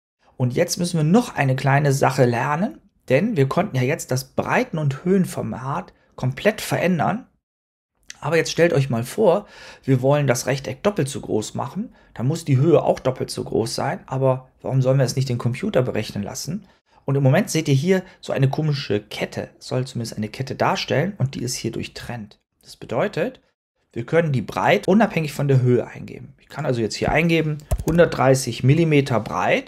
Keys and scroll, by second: 27.3-28.3 typing, 28.5 Return.